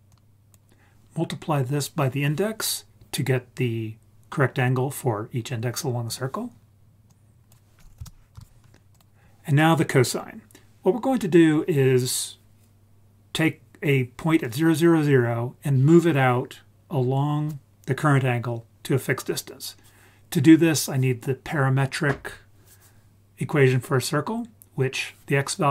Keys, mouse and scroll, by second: 0.1 click, 7.0-8.3 drag, 8.9 click.